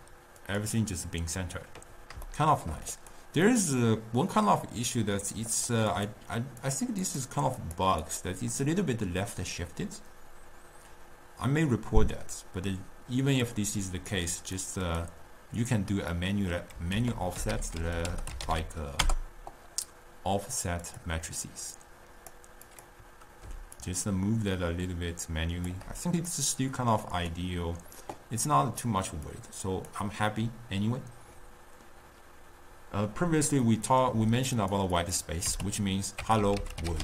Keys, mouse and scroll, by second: 0.9 click, 2.3-3.0 shift+middle drag, 3.0 click, 3.5-5.6 middle drag, 5.6 click, 6.0 click, 6.7 click, 7.1 click, 7.7 click, 8.1 click, 13.5 click, 14.2 click, 14.9 click, 16.2 middle click, 17.1 ctrl+a, 17.7 f, 21.9-23.2 drag, 24.0-26.4 shift+drag, 26.4-27.4 middle drag, 27.4 click, 29.6 click, 33.9-34.7 middle drag, 34.7-37.0 drag.